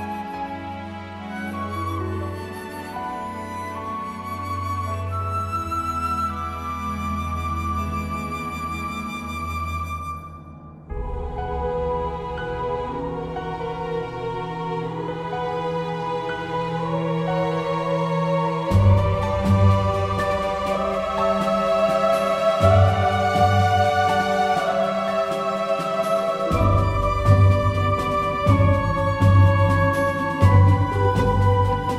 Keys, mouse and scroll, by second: 0.1-1.3 drag, 3.3 ctrl+r, 6.8-8.2 middle drag, 8.2 ctrl+r, 10.1 ctrl+r, 13.1 ctrl+r, 16.4 Tab, 16.7 middle click, 18.2 Tab, 19.8 z, 20.6 z, 21.5 super+middle click, 22.5 ctrl+r, 24.8 ctrl+r, 26.8 Tab, 28.4 click, 28.7 KP_1.